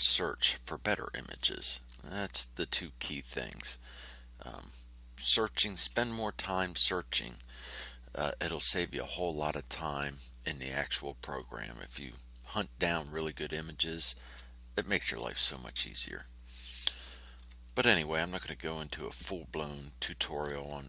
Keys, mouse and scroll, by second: 4.0-5.5 drag, 11.3 click, 11.9 middle click, 16.4 ctrl+scroll up 2, 17.6 ctrl+scroll down 2, 18.2 ctrl+middle click, 18.9 click.